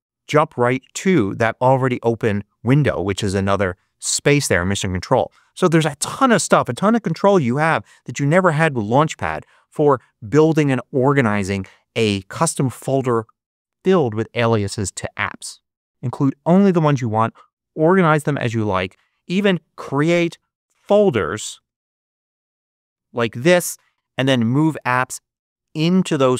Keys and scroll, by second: 20.3 shift+super+n, 21.3-23.4 typing.